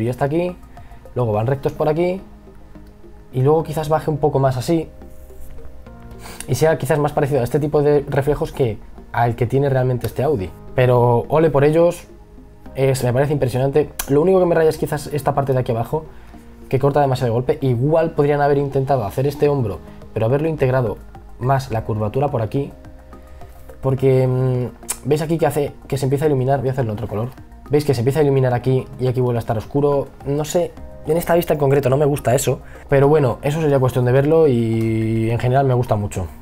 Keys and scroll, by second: 7.2 ctrl+z, 9.2 e, 10.5 b, 17.1 ctrl+z, 20.8 ctrl+z, 33.2 e.